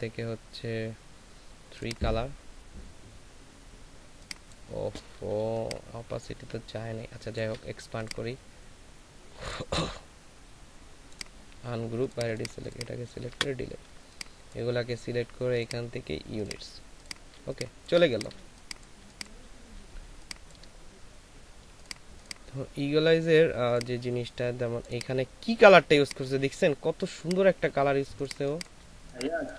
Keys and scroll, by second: 5.4 ctrl+space, 13.3 Delete, 17.3 ctrl+alt+space, 18.9 ctrl+alt+space, 19.7 ctrl+alt+shift+space, 28.4 space.